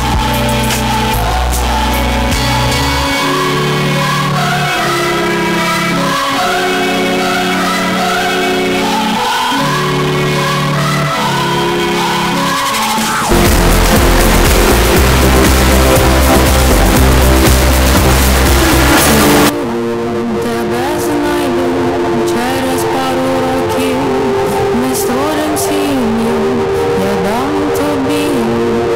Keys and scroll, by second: 19.5 Page_Down.